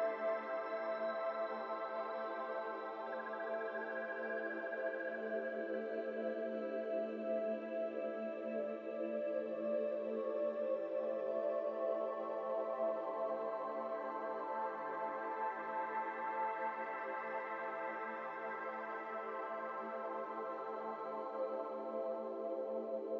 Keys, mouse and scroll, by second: 5.3-5.6 shift+middle drag, 5.6 g, 6.4 z, 6.5 z, 6.9 Tab, 7.4 Tab, 9.3 F3, 9.8 Tab, 10.3 a, 10.6 x, 11.9 Tab, 11.9 middle click, 12.8 KP_1, 13.1 Tab, 14.4 shift+middle click, 14.5-15.5 shift+scroll up 9, 15.3 shift+middle click, 15.6 alt+z, 15.8 click, 16.9 g, 18.1 z, 18.1 z, 18.3 g, 20.0 shift+scroll down 1, 20.2-20.5 scroll up 5, 20.5-21.7 scroll down 10, 21.7 s.